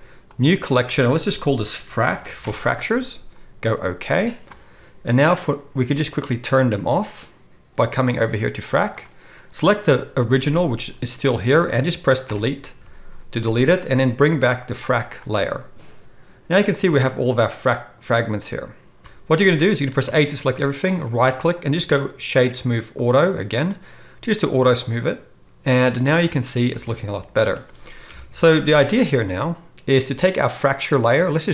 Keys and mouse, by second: 5.3 click, 8.6 click, 10.7 g, 12.3 Delete, 14.8 click, 15.3-19.0 middle drag, 19.0 ctrl+z, 19.0-19.9 drag, 19.9-24.2 right drag, 20.0 a, 24.2-31.5 middle drag, 26.7 alt+a, 28.1 KP_1, 30.8-31.5 drag, 30.8-31.5 right drag.